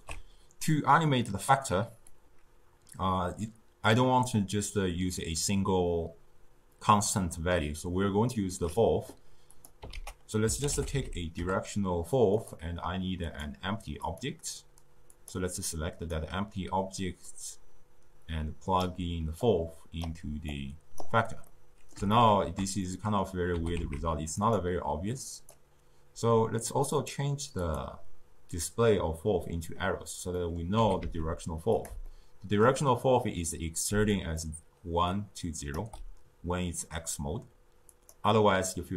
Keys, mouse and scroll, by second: 2.0-5.2 drag, 9.4 click, 9.8 ctrl+a, 13.3 click, 13.9 click, 15.1 click, 17.2-19.4 drag, 20.4 click, 21.4-23.5 middle drag, 23.5 g, 25.2 click, 26.8 click, 27.6-30.3 drag, 30.3 middle click, 30.8 g, 32.0-33.8 shift+middle drag, 33.8 d, 34.1 click, 34.3-35.1 d, 35.1 click, 35.7 d, 37.8 click.